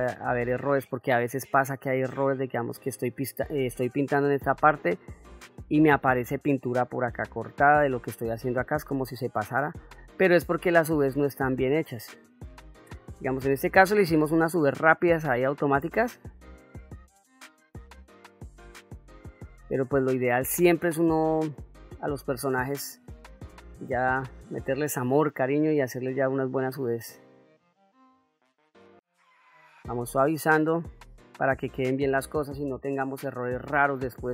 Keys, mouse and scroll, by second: 1.7 middle click, 3.8 middle click, 4.6-5.7 drag, 6.9 middle click, 9.0 middle click, 10.0-12.7 drag, 12.8 middle click, 13.9-15.0 drag, 15.1 middle click, 15.8-17.8 drag, 18.1 middle click, 19.0-20.3 drag, 20.6 middle click, 21.9 click, 22.8 ctrl+middle click, 23.9 shift+middle click, 24.5 middle click, 25.7 ctrl+middle click, 26.4 shift+middle click, 26.9 middle click, 27.9-32.3 drag, 33.0 click, 33.8 shift+middle click.